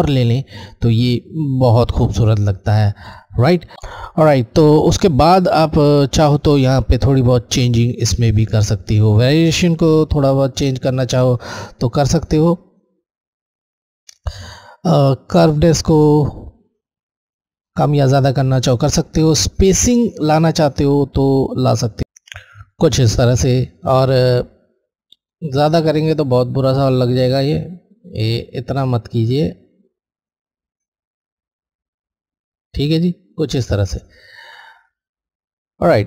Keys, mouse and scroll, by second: 0.2 click, 9.2 click, 11.6 click, 15.3 click, 20.6 click, 20.7 click, 26.9 click.